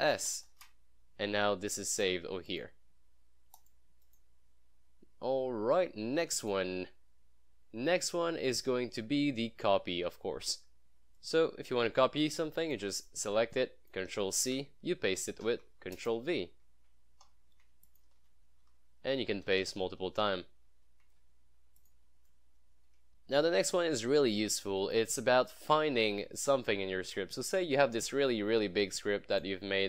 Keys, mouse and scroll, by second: 0.3 ctrl+shift+s, 2.0 click, 4.8 scroll up 1, 6.5 click, 6.7 scroll up 1, 10.5 scroll down 1, 11.2-12.8 drag, 14.4 ctrl+c, 15.5 ctrl+v, 16.3 ctrl+v, 17.3 ctrl+z, 17.9 click, 18.2 ctrl+v, 18.6 ctrl+z, 19.5 ctrl+v, 20.1 ctrl+z, 21.8 click, 22.0 click, 24.9 click, 28.5 scroll down 1.